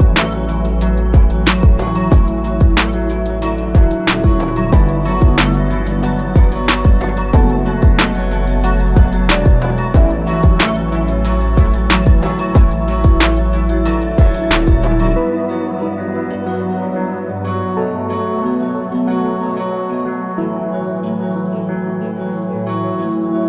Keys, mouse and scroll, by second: 0.4-1.9 scroll down 1, 1.9 click, 3.1 alt+scroll down 1, 5.8 alt+scroll up 2, 8.2 click.